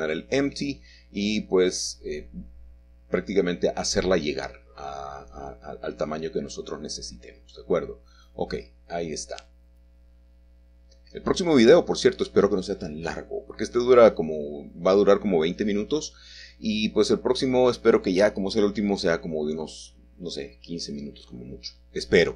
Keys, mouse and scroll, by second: 0.1 scroll down 1, 0.2 shift+middle click, 0.5 shift+middle click, 0.9 click, 1.2 g, 1.7 click, 2.0 shift+middle click, 2.5 scroll up 3, 2.5 KP_1, 2.8 shift+middle click, 3.0 shift+middle click, 3.3 g, 4.2 click, 4.6 s, 5.1 click, 5.3 middle click, 5.6-5.9 scroll down 1, 5.9 shift+middle click, 6.2 shift+middle click, 6.2 scroll up 1, 6.7 g, 7.3 shift+click, 7.4 shift+middle click, 8.0 x, 8.6 click, 8.8 g, 8.9 x, 9.6 shift+click, 10.3 s, 10.6 shift+click, 10.7 scroll down 1, 12.7 shift+middle click, 14.3 click, 14.8 g, 15.1 shift+middle click, 15.4 shift+click, 15.7 shift+middle click, 15.9 shift+scroll up 2, 16.0 shift+middle click, 16.3 middle click, 16.3 click, 16.5 click, 16.8 scroll down 1, 17.1 g, 17.5 click, 17.6 shift+middle click, 18.1-19.1 shift+scroll up 2, 18.4 1, 19.6 click, 19.7 scroll up 1, 20.2 middle click, 20.2-20.6 scroll down 2, 21.7 shift+middle click, 21.8 shift+middle click, 22.0 g, 22.0 y.